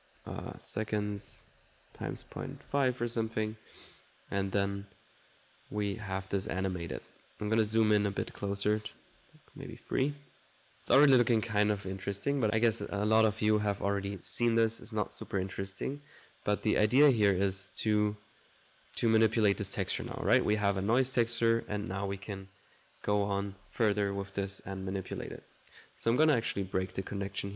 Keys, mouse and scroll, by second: 0.4-4.4 middle drag, 4.4-6.4 drag, 6.4 middle click, 6.7 click, 7.5 click, 8.7 click, 18.4-20.6 middle drag, 20.6-24.3 drag, 24.3-25.8 middle drag, 26.2 right click, 27.0 click.